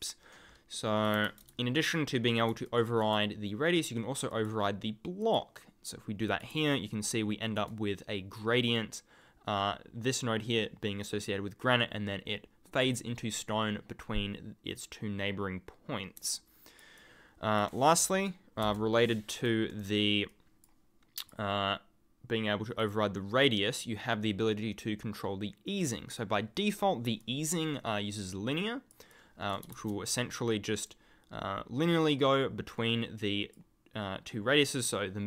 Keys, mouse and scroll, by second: 0.8-1.7 typing, 2.6 ctrl+click, 4.3 click, 5.2 click, 6.2 click, 6.6 ctrl+click, 6.9-7.2 ctrl+scroll up 1, 7.2 ctrl+scroll down 1, 16.2 ctrl+click, 16.4-16.9 ctrl+scroll down 1, 17.2 ctrl+scroll up 1, 18.6 Delete, 19.3 right click, 20.3 click, 22.8 click, 27.2 ctrl+click, 27.8 ctrl+scroll down 1, 28.5 ctrl+scroll up 1, 29.2 ctrl+scroll up 1, 29.4 ctrl+scroll.